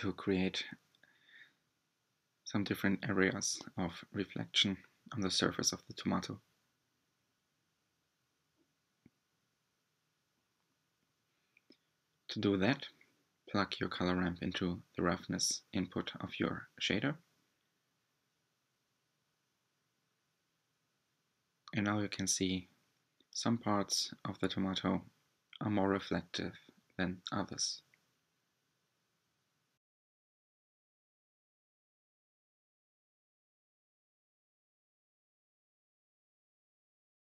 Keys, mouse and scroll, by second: 4.9-11.1 drag, 13.7-14.2 ctrl+shift+drag, 22.3-23.5 shift+middle drag, 23.5 click, 24.6-27.4 drag, 34.5 click.